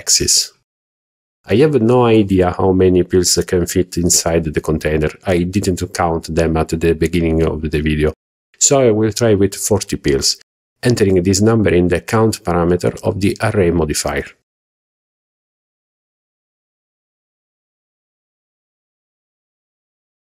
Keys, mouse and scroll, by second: 14.3-16.2 drag, 17.5-18.0 scroll down 3, 18.3-18.6 shift+middle drag, 19.5-20.1 shift+middle drag.